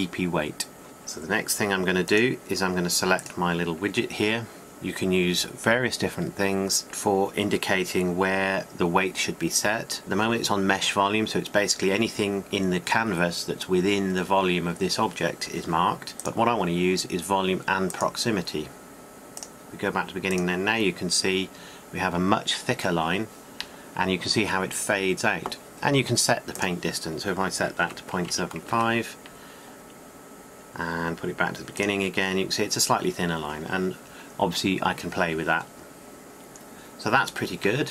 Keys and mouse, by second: 3.4-28.0 drag, 28.0-31.1 middle drag, 31.1-37.8 drag.